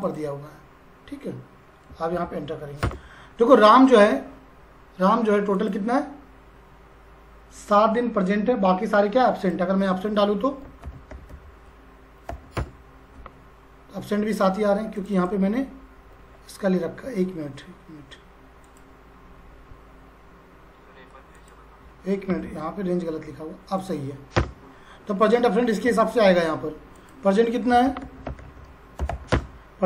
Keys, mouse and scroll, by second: 0.0 click, 2.1 shift+0, 2.8 Return, 5.5 click, 9.4 click, 10.4-12.7 typing, 15.0 click, 18.7 click, 21.3 click, 23.8 click, 24.3 Return, 25.2 click, 27.4-29.6 typing.